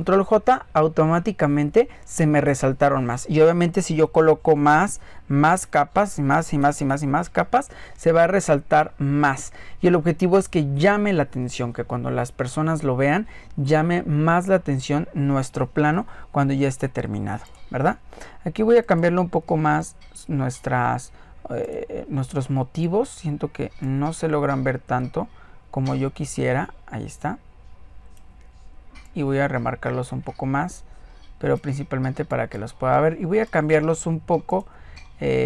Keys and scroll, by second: 4.3 ctrl+j, 5.6-6.6 typing, 5.7 ctrl+j, 6.3 ctrl+j.